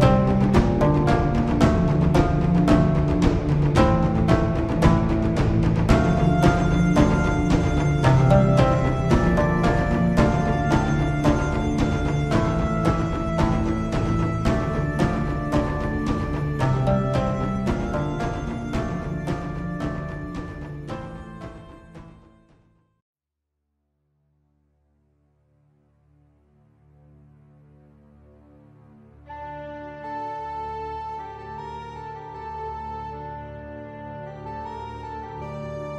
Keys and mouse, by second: 0.4-1.9 middle drag, 4.7 Tab, 7.9 click, 8.8-12.7 middle drag, 14.7 Tab, 16.9-18.1 drag, 18.8-19.9 drag, 23.8 click, 35.7 Tab.